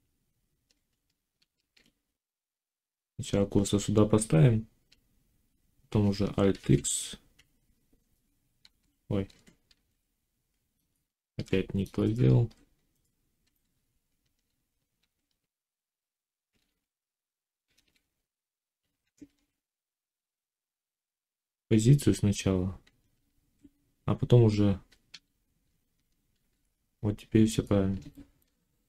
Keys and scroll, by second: 1.2 shift+s, 6.5 ctrl+x, 8.4 ctrl+z, 9.5 alt+x, 10.9 Tab, 14.8 ctrl+a, 16.5 alt+a, 17.6 ctrl+z, 19.0 ctrl+a, 23.1 Tab, 25.0 a, 26.3 alt+x.